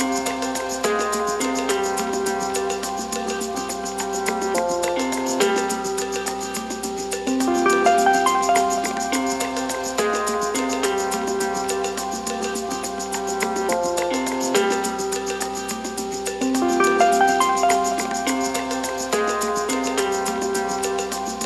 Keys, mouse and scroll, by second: 2.6 Tab, 3.4 ctrl+2, 4.2-5.1 right drag, 5.1 middle click, 5.6-5.9 scroll up 1, 5.9 Tab, 6.2 middle click, 6.9 ctrl+b, 12.1 alt+s, 13.6 alt+e, 18.5 Tab, 19.0-20.2 scroll down 3, 20.2-21.1 middle drag, 21.1 Tab.